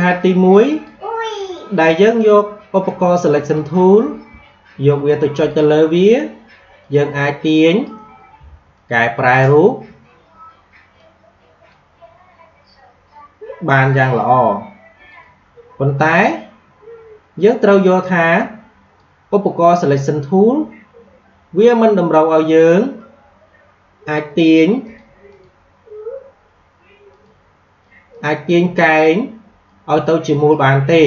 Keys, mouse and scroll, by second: 13.8-17.4 drag, 18.3-21.2 drag, 24.8-31.0 drag.